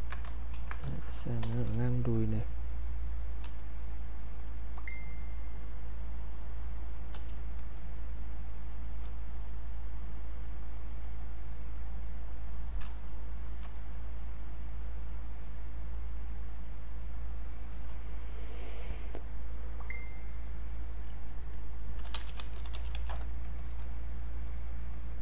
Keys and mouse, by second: 0.5 ctrl+shift+1, 1.0 click, 3.5 w, 3.8 click, 7.1 q, 7.7 space, 8.2 click, 8.3 space, 10.6 click, 21.7-23.4 typing, 24.7 click.